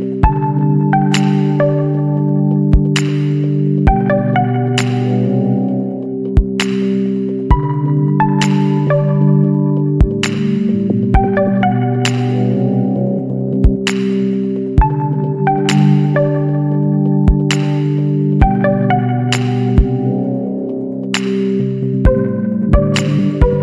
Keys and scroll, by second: 0.2 space, 3.0 Return, 6.2 ctrl+-, 9.9 Return, 11.4 Return, 11.8 ctrl+-, 17.9 space, 20.6 ctrl+alt+z.